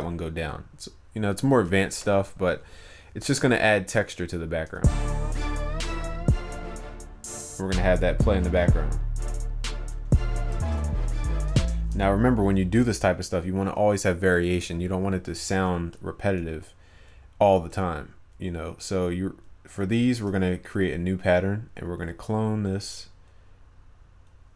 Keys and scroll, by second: 10.8 ctrl+s.